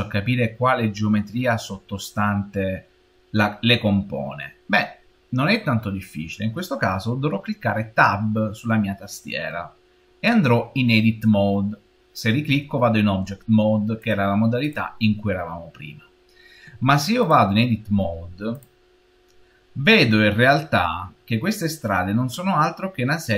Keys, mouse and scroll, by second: 14.6 click, 17.0 click, 22.4-23.1 scroll up 1, 23.1-23.3 scroll down 1.